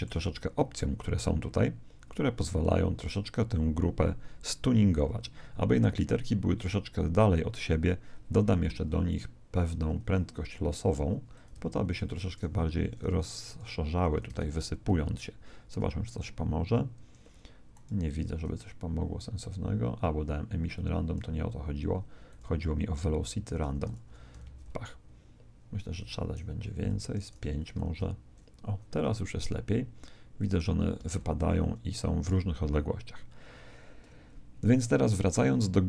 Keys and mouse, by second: 8.8-11.5 middle drag, 11.3 click, 12.6 Escape, 13.5 click, 14.3 alt+a, 16.9 Escape, 17.7 click, 20.7-25.1 drag, 24.4 alt+a, 25.8 Escape, 26.9 click, 27.8 alt+a, 34.1 alt+a, 35.1-35.8 middle drag.